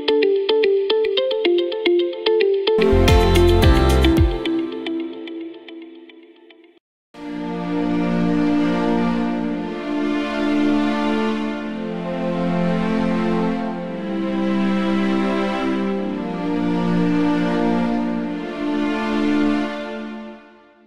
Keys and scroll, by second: 2.2 s.